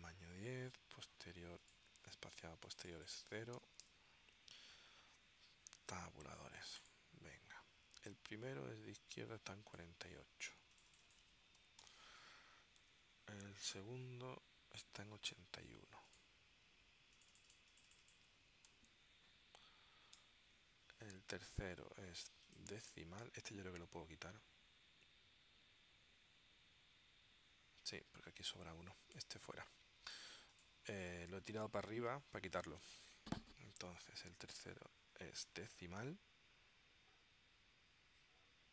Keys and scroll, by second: 3.7 0, 3.9 Tab, 11.5-12.4 typing, 13.0 Tab, 18.6-19.6 typing, 20.3 Tab.